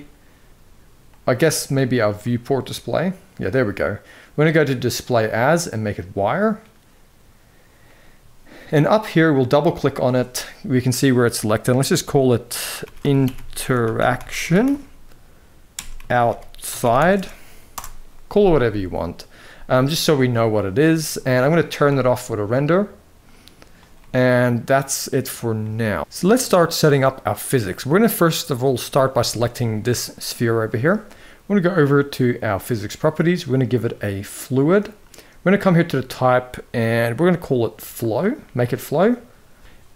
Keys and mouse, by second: 1.9-5.8 drag, 9.2 click, 11.9-17.5 shift+drag, 21.6 click, 23.7-24.8 middle drag, 25.3-26.1 middle drag, 28.1 click, 28.6 middle click, 29.1 shift+middle drag, 32.2 click, 34.2-37.8 drag.